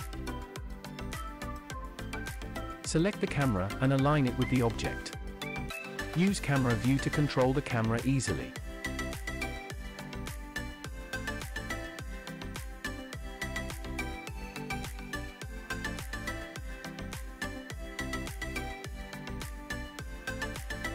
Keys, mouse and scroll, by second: 0.0 click, 0.8 scroll down 1, 2.7 click, 3.3 KP_0, 5.5 click, 8.2 click, 8.9 middle click, 10.7 shift+middle click, 11.5 middle click, 12.4 shift+middle click, 13.6 middle click, 15.7 shift+middle click, 18.7 click, 19.6-20.9 drag.